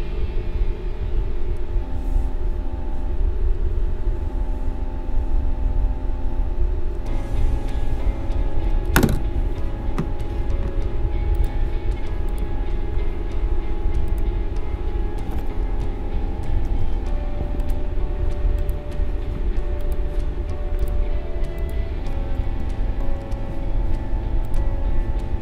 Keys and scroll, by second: 16.6 ctrl+c, 23.0 ctrl+c.